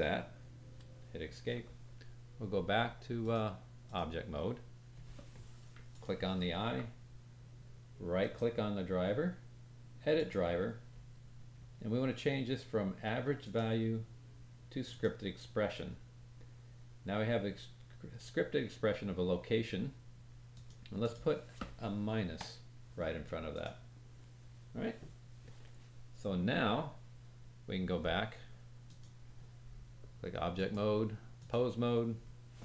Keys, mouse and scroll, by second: 3.1-6.0 drag, 8.1 right click, 28.9-30.5 drag.